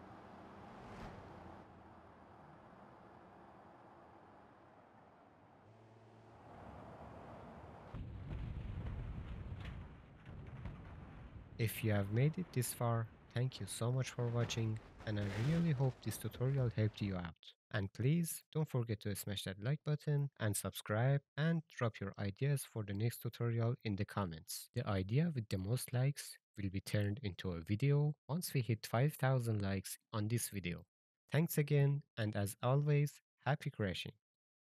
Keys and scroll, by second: 8.4 alt+Down, 14.0 alt+Down.